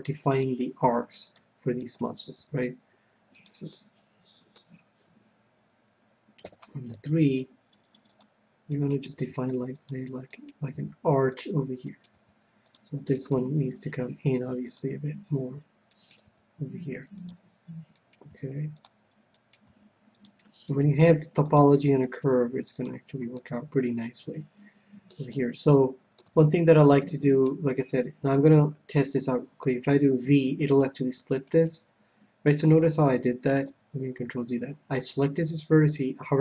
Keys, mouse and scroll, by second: 1.1 g, 1.2-3.6 middle drag, 2.7 g, 3.6 right click, 3.8-5.3 drag, 4.0-5.6 middle drag, 6.6 KP_3, 7.5 g, 8.5 click, 9.0 right click, 9.5 g, 11.7 g, 12.5 g, 14.0 g, 14.1 click, 14.1-15.1 right drag, 15.1-16.8 drag, 16.3-18.1 right drag, 16.6 g, 17.6-18.7 drag, 18.3 right click, 18.7 g, 20.0 g, 20.8-24.8 drag, 20.8-22.9 right drag, 21.3 g, 22.7 g, 22.9-25.2 middle drag, 23.6 right click, 25.6-27.2 middle drag, 26.5 KP_1, 27.6-29.6 right drag, 29.6 v, 31.1-32.7 drag, 31.8-33.5 right drag, 33.5 ctrl+z, 34.0 ctrl+z.